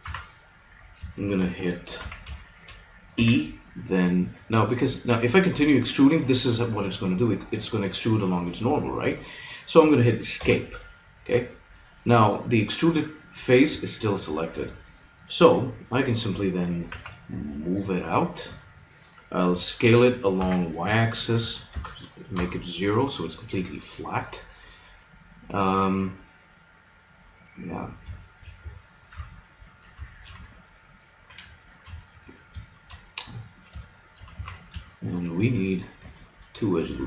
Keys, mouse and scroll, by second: 0.0 KP_3, 0.6 middle click, 2.0 z, 3.2 e, 10.5-12.1 drag, 16.9 g, 20.4 s, 24.4 middle click, 25.3 middle click, 27.6 middle click, 29.2 KP_3, 30.2 middle click, 33.0-34.0 middle drag, 34.4 z.